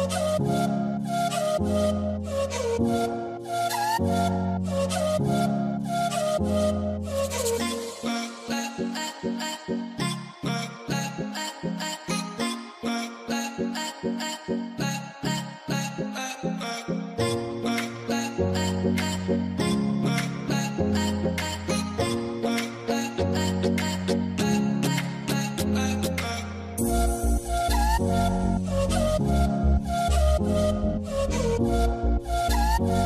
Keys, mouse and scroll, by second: 0.2 shift+click, 0.5 right click, 4.5 right click, 5.7 double click, 8.1 a, 11.6 double click, 13.6 space, 14.6 Return, 16.1 v, 18.1 alt+scroll down 3, 18.9 shift+click, 22.2 Return, 31.0 ctrl+0, 32.6 right click.